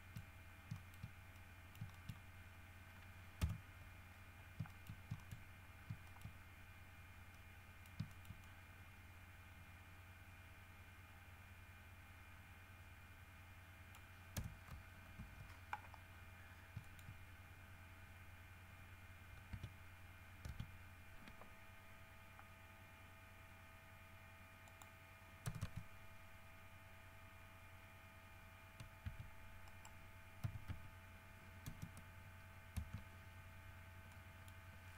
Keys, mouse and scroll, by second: 0.1 shift+middle click, 0.9 shift+middle click, 1.5 shift+middle click, 3.6 KP_7, 4.9 shift+middle click, 5.4 shift+middle click, 5.6 shift+scroll up 1, 6.0 scroll down 1, 6.3 shift+middle click, 7.5 middle click, 8.4-11.5 shift+middle drag, 13.1-14.4 middle drag, 14.5 KP_1, 15.4 KP_Decimal, 16.3-16.9 scroll up 4, 17.1 shift+middle click, 19.7 Tab, 20.7 Tab, 23.1-23.4 scroll down 2, 23.7 scroll down 2, 24.9-25.2 scroll up 1, 25.7 KP_0, 25.8 KP_Enter, 29.3 e, 29.9 right click, 30.6 s, 30.9 x, 31.9 KP_0, 33.0 KP_Enter, 33.9-34.3 scroll down 2, 34.3 middle click.